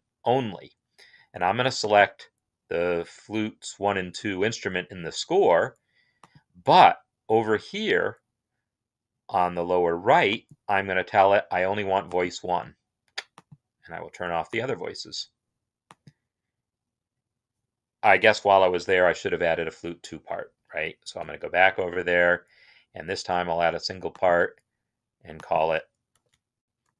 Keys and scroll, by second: 18.7 alt+f, 20.0 Up, 20.4 Up, 20.5 Up, 21.0 Return, 26.0 ctrl+a, 26.8-26.9 typing.